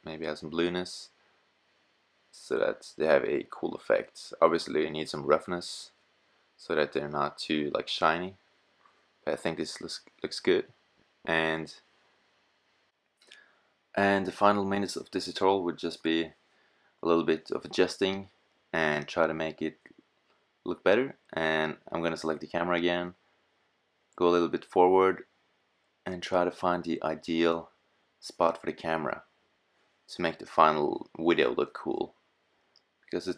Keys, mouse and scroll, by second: 3.4 click, 3.7 middle click, 3.9 middle click, 4.0 click, 4.0 middle click, 4.2 middle click, 4.2 click, 4.5 middle click, 4.6 click, 4.6 middle click, 4.7 click, 5.1 middle click, 7.7-8.2 middle drag, 10.1 middle click, 10.3 click, 11.1-12.2 middle drag, 12.8-18.9 middle drag, 22.1 shift+f, 22.3-23.0 scroll up 4.